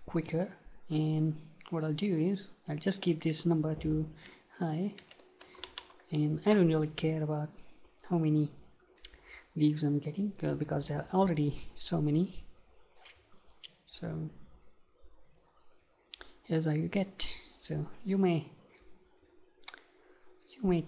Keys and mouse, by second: 2.9-6.3 drag, 9.1-10.8 right drag.